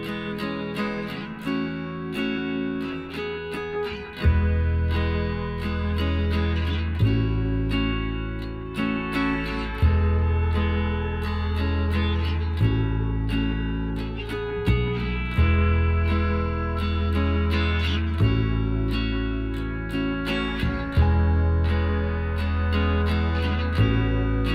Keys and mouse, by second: 0.5 g, 2.6-3.8 drag, 5.8-7.8 right drag, 6.8 b, 7.8 b, 8.7-11.8 drag, 11.1 middle click, 11.2 right click, 11.8 middle click, 12.0-13.3 drag, 12.4-14.1 right drag, 13.3 b, 14.9 e, 17.3-18.9 drag, 19.2-20.8 drag, 20.5-22.1 right drag, 21.3 b, 22.8 g.